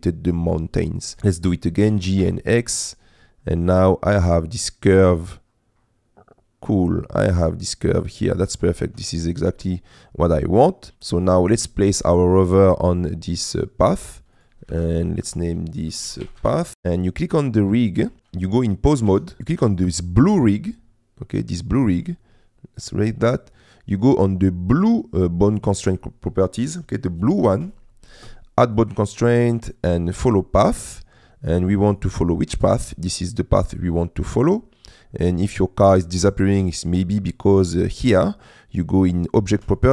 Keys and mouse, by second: 1.9 g, 2.2 x, 8.4 click, 8.9 Tab, 11.2 click, 14.7 F2, 16.7 click, 16.7 BackSpace, 19.1 ctrl+Tab, 19.7 click, 22.8 click, 28.9-30.4 drag, 32.0 click.